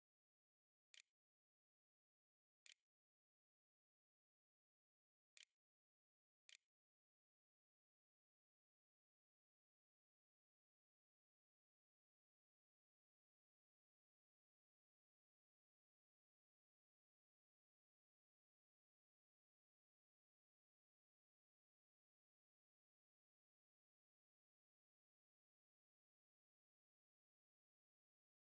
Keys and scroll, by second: 0.0-0.8 typing, 1.2 Delete, 1.3 Return, 1.9-5.1 typing, 5.8 ctrl+z, 6.2 ctrl+s, 6.7 a.